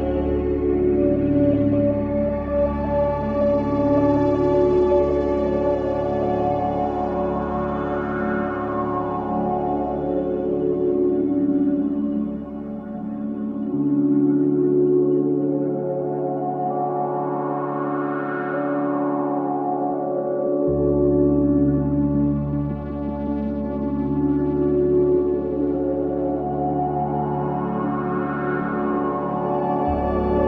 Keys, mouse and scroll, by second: 0.9 click, 1.4-2.4 scroll up 1, 2.5 alt+middle click, 3.6 click, 4.8 ctrl+z, 5.5 click, 9.3 click, 9.8 alt+middle click, 10.3-11.2 scroll down 1, 11.2-11.8 scroll up 1, 11.8 click, 12.5 ctrl+z, 14.3-14.7 scroll up 1, 15.2 alt+middle click, 16.5 scroll down 1, 16.8 alt+middle click, 18.4 w, 19.3 space, 19.5 click, 19.8 space, 20.3 alt+click, 20.8 alt+middle click, 21.1 alt+right click, 21.4 alt+click, 22.5 click, 24.7 =.